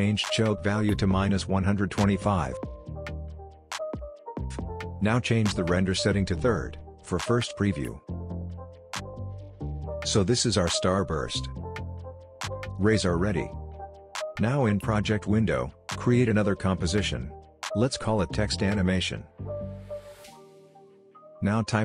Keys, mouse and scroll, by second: 3.3 Return, 4.1 click, 5.6-9.1 drag, 9.5-11.3 scroll up 1, 12.4-13.3 scroll down 1, 13.3-13.6 scroll up 1, 14.0 click, 16.6-18.6 typing, 18.8 Return, 19.5 scroll down 1, 19.7-20.5 scroll up 1, 20.5 click, 21.4-21.8 typing.